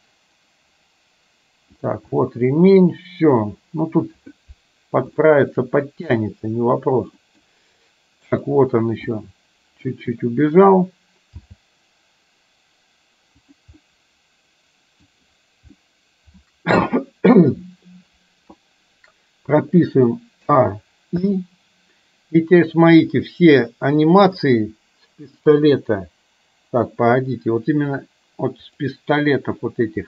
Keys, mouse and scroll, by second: 2.1 middle click, 5.2 scroll up 1, 5.4 shift+middle drag, 6.2 scroll up 1, 6.4-7.2 middle drag, 7.4 middle click, 9.2 middle click, 11.5 g, 13.9-15.1 middle drag, 15.9-17.4 middle drag, 20.5 a, 21.4 i, 23.1-24.6 drag, 28.7 click.